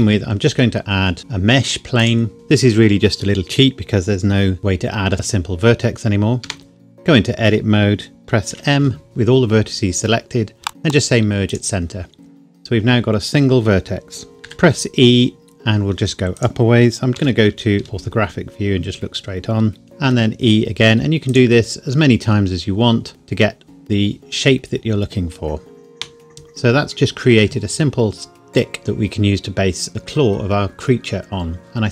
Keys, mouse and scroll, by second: 2.0 click, 6.4 Tab, 8.5 m, 11.6 click, 12.5-13.2 scroll up 1, 13.2-13.8 scroll down 1, 14.4-16.4 scroll down 1, 16.4 click, 17.8 KP_1, 20.1 e, 21.3 click, 21.5 e, 23.6 click, 27.8 Tab.